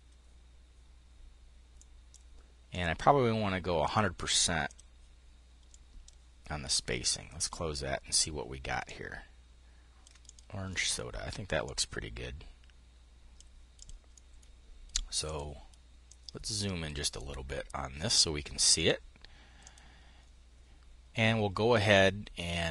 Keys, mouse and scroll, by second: 1.3-2.3 drag, 3.4-4.5 drag, 5.5-6.9 drag, 8.3-9.9 ctrl+drag, 10.2 click, 13.7-14.7 drag, 14.8-17.0 drag, 18.3-19.5 drag, 21.3-22.7 drag.